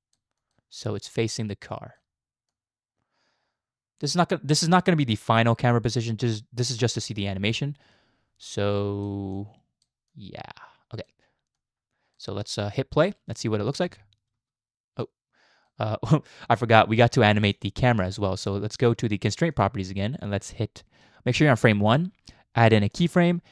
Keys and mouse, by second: 0.9-2.0 drag, 2.5-4.1 drag, 5.8 click, 8.5 click, 9.4 click, 10.2 click, 10.3 middle click, 11.6 click, 11.6 middle click, 13.8 space, 14.3 space, 15.0-15.7 drag, 17.5 click, 19.5 click, 23.0 click.